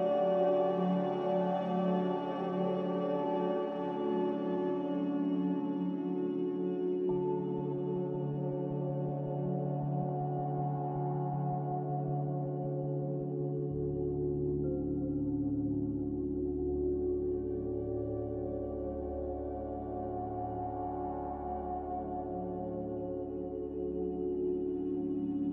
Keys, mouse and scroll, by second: 3.9 5, 4.2 Return, 15.6 b.